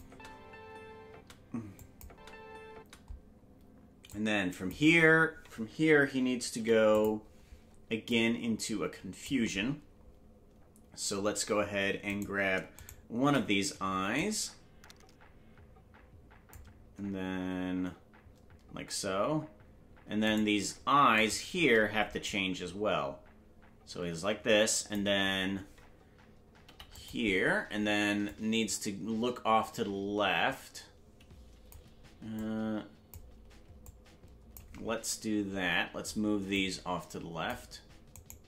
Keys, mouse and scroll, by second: 0.0 space, 1.8 click, 1.8 space, 2.0 space, 4.1 click, 4.1 space, 6.5 i, 8.1-9.2 drag, 12.3 right click, 12.9 shift+right click, 14.1-16.5 drag, 20.5 right click, 21.4 shift+right click, 22.2-24.9 drag, 26.6 i, 28.2-31.7 drag, 32.3-33.1 drag, 33.8 click, 36.5-37.5 drag, 38.3 right click.